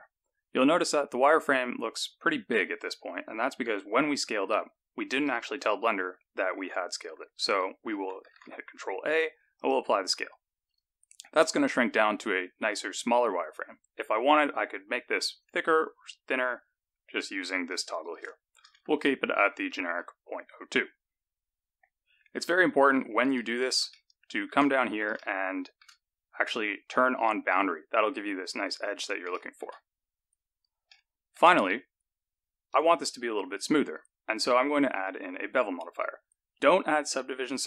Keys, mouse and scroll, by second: 0.6-1.2 scroll up 2, 3.0-3.6 scroll down 1, 3.8 scroll down 1, 5.2 n, 8.3 ctrl+a, 10.6 click, 11.4-12.8 scroll up 11, 15.6 click, 18.0 click, 22.3-23.7 scroll down 10, 23.8 shift+middle click, 24.7-25.1 scroll up 3, 25.1 shift+middle click, 27.0 click, 28.7-29.3 scroll down 5, 29.3 shift+middle click, 29.8-30.6 scroll up 3, 30.8 shift+middle click, 32.6 click, 33.8 click, 36.3-37.6 scroll up 10.